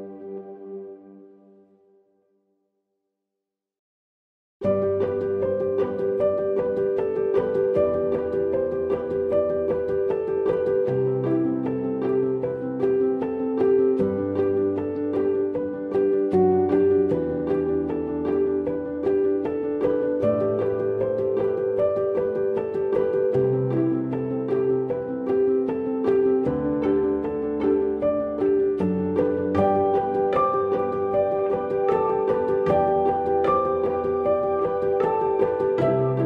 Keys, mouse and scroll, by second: 15.7-19.8 scroll down 2, 20.9 click, 20.9 scroll down 1.